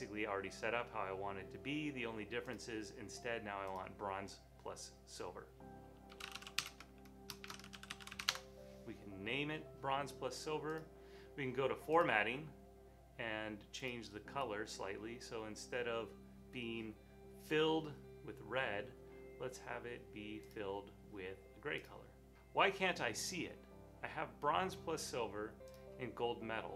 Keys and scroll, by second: 5.9-8.6 typing, 11.2 typing.